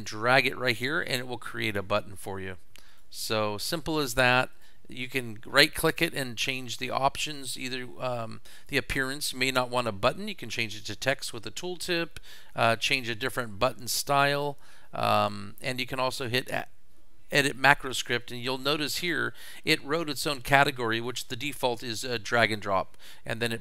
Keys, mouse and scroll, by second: 1.6 click, 2.9 click, 4.6 right click, 8.6 click, 13.7 click, 15.2 right click, 16.1 click, 17.5 click, 18.3 click.